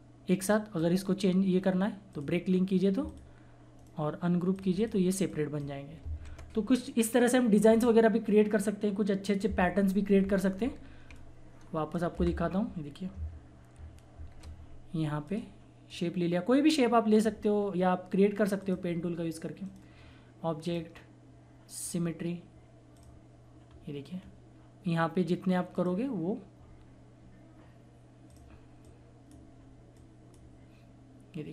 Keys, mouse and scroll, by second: 3.7 right click, 4.5 click, 10.5 ctrl+Num_Lock, 10.5 ctrl+z, 11.1 click, 12.1 Delete, 14.1 shift+F4, 15.3-18.5 drag, 19.6 right click, 20.6 click, 22.9 click, 23.6-24.0 scroll down 1, 25.7 click, 28.2 click.